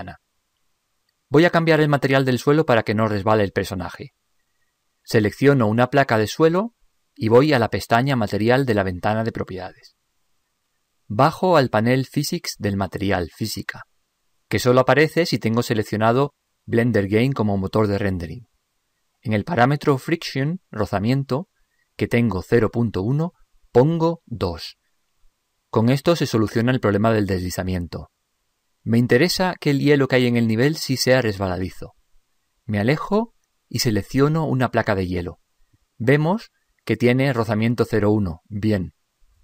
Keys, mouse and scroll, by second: 0.0 ctrl+Up, 6.2-8.0 right drag, 8.4-10.2 drag, 10.3-12.0 drag, 16.0-17.7 drag, 23.5-25.2 drag, 32.8-35.1 middle drag, 35.3-36.8 right drag.